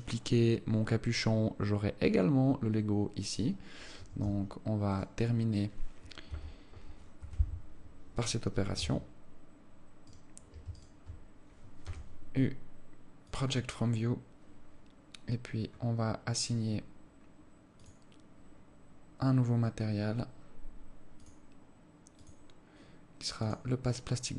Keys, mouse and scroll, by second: 4.7 Escape, 5.3 right click, 6.7 KP_1, 7.6 KP_7, 9.2 Tab, 10.5 right click, 11.2 alt+shift+right click, 12.3 u, 16.7-18.2 scroll up 4, 18.2 click, 19.0 scroll up 1, 21.6 click, 22.6 click.